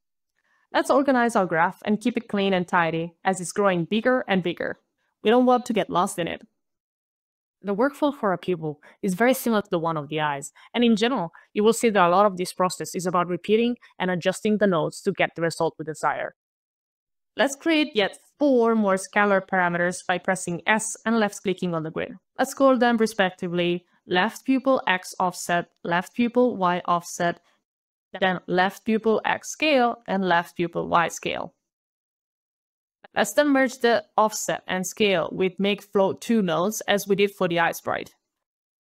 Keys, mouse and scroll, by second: 0.4 alt+scroll down 2, 0.9 alt+click, 1.1-1.5 alt+scroll, 2.1 alt+click, 4.4 alt+c, 5.6 alt+shift+e, 6.0 alt+y, 6.2 alt+e, 6.6 alt+Return, 16.4 alt+shift+e, 16.4 alt+y, 16.4 alt+Return, 16.8 alt+click, 17.7 alt+click, 18.0 alt+click, 18.1 alt+scroll up 1, 18.2 alt+click, 18.4 alt+s, 18.5 alt+click, 19.2 alt+shift+l, 19.3-20.0 typing, 20.1 alt+shift+-, 20.2 alt+shift+x, 20.3 alt+shift+-, 20.5 alt+shift+o, 20.6 alt+shift+p, 20.7 alt+BackSpace, 20.8 alt+BackSpace, 20.9 alt+shift+o, 21.0 alt+f, 21.1 alt+f, 21.2 alt+s, 21.3 alt+e, 21.4 alt+t, 21.6 ctrl+alt+a, 21.7 ctrl+alt+c, 21.8 alt+Return, 22.4 alt+click, 22.5 alt+click, 22.8 alt+click, 23.2 alt+right click, 24.3 alt+s, 24.4 alt+right click, 24.6 alt+scroll up 3, 24.8 ctrl+alt+v, 24.9 alt+Left, 25.3 alt+BackSpace, 25.3 alt+shift+u, 25.4 alt+BackSpace, 25.5 alt+shift+y, 25.6 alt+Return, 26.4 alt+click, 27.7 alt+s, 27.9 alt+click, 28.1 alt+shift+l, 28.2 alt+shift+-, 28.2 alt+shift+p, 28.3 alt+u, 28.4 alt+i, 28.6 alt+shift+-, 28.8 alt+shift+x, 29.0 alt+shift+s, 29.0 alt+shift+c, 29.2 alt+BackSpace, 29.3 alt+a, 29.3 alt+l, 29.3 alt+e, 29.5 alt+Return, 30.3 alt+click, 31.5 alt+click, 31.8 alt+s, 31.9 alt+click, 32.1 ctrl+alt+v, 32.2 alt+Left, 32.4 alt+BackSpace, 32.4 alt+shift+y, 32.5 alt+Return, 32.6 alt+click, 34.1 alt+click, 34.3 alt+right click, 35.1 alt+m, 35.2 alt+a, 35.2 alt+k, 35.3 alt+e, 36.5 alt+Up, 36.7 alt+Return, 37.9 alt+click.